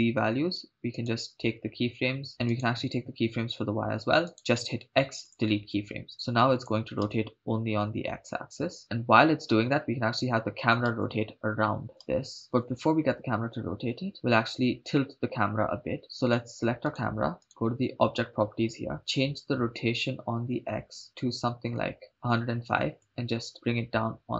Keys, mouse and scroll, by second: 0.9 click, 0.9 right click, 2.3 shift+right click, 2.6 shift+right click, 4.4 shift+right click, 4.4 x, 6.5 click, 7.1 shift+space, 11.0 shift+space, 16.0 click, 16.0 shift+space, 16.4 right click, 17.4 right click, 17.5 click, 21.0-22.1 drag, 23.0-24.3 drag.